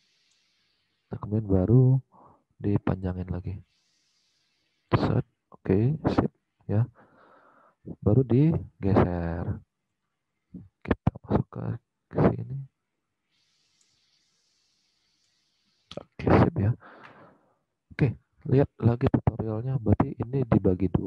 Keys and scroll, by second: 18.2 alt+Tab.